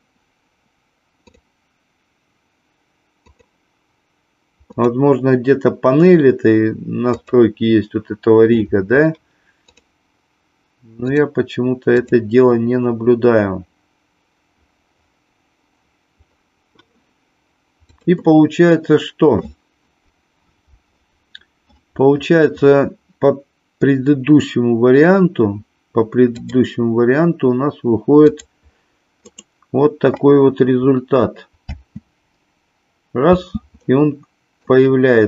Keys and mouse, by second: 1.2 click, 3.2 click, 4.7 click, 7.1 click, 9.7 click, 11.9 click, 17.8-26.0 drag, 26.3-29.6 drag, 31.6 space, 33.4 space, 34.6-35.2 drag.